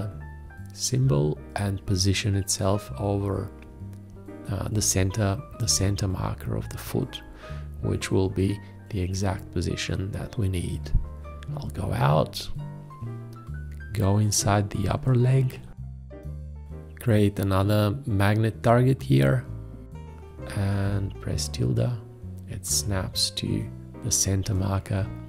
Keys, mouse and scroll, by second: 15.6 F2, 17.6 shift+`, 20.3 click.